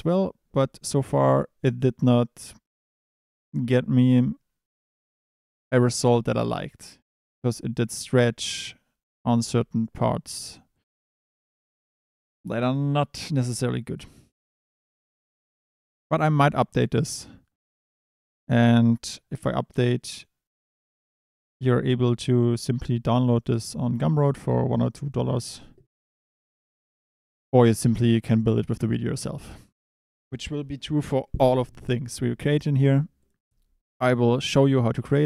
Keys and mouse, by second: 7.1 Tab, 7.7 Tab, 8.1 Tab, 8.4 click, 9.0 click, 9.6 Tab, 9.9 click, 10.7 click, 15.0 click, 24.2 click, 32.9 click.